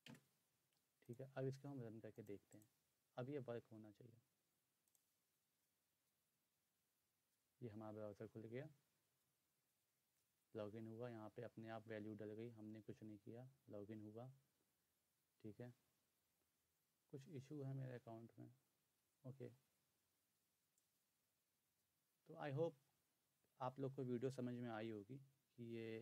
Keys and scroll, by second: 0.1 Return.